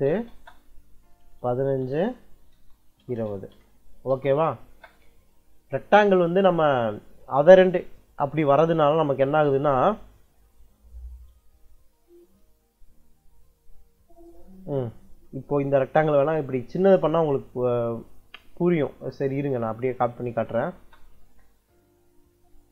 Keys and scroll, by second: 0.0-1.7 typing, 2.4 Return, 2.8 2, 3.4 ', 4.0 Return, 4.6 space, 18.2 Escape, 20.0 c, 20.6 space.